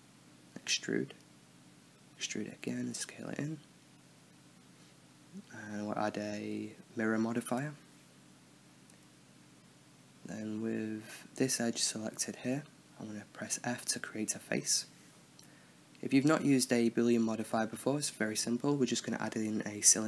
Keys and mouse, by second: 0.1 e, 2.6 e, 3.9 s, 4.5 click, 5.2 s, 6.4 a, 6.9-7.6 drag, 8.0-9.0 drag, 8.7 a, 9.2 click, 9.6-10.0 middle drag, 10.7 middle click, 10.9 KP_7, 11.7 click, 12.0 middle click, 12.6 right click, 13.1-15.2 middle drag, 14.2 f, 16.1 Tab, 17.6 shift+a, 19.6 s.